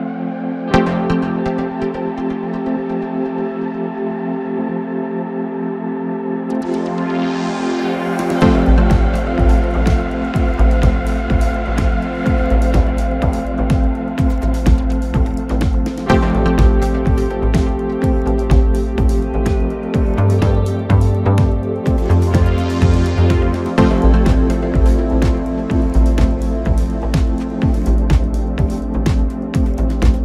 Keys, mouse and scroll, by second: 0.3 shift+d, 1.8-3.2 middle drag, 3.2 click, 3.7 shift+d, 5.1-7.1 middle drag, 7.1 g, 7.8 click, 8.0 g, 8.7 KP_7, 9.4 scroll down 2, 9.6-10.9 middle drag, 10.9-12.0 scroll up 3, 12.0-15.8 middle drag, 15.8-17.1 drag, 17.1-17.6 scroll up 1, 18.0 click, 18.6 s, 20.0 KP_7, 20.7 s, 21.5 click, 21.7 s, 22.4 click, 22.6 s, 23.6 click, 23.8 s, 24.6 click, 24.8 s, 26.2 click, 26.4 s, 27.8 click, 28.0 s, 28.7 scroll down 2, 28.8-29.9 middle drag, 29.9 scroll down 2, 30.0 middle click.